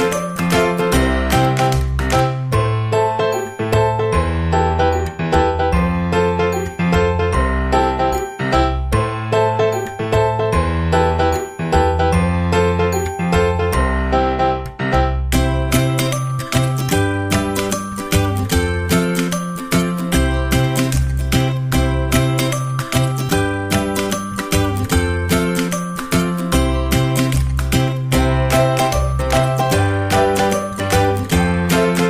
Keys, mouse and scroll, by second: 31.4-32.0 right drag.